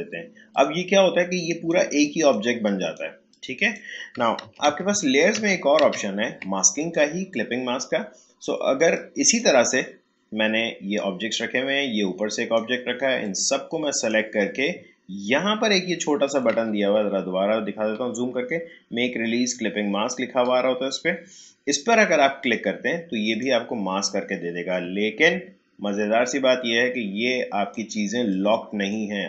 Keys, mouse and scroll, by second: 4.4 ctrl+z, 6.8-17.1 drag, 17.1 scroll up 1, 19.9 shift+scroll down 1, 22.4 click, 26.2-29.2 drag.